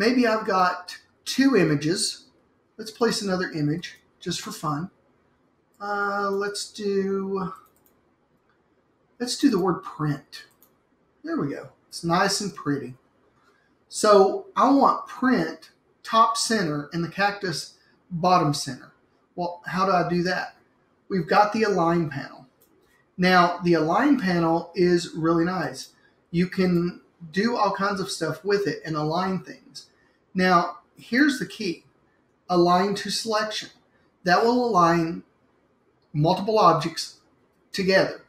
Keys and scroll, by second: 3.8 super+d.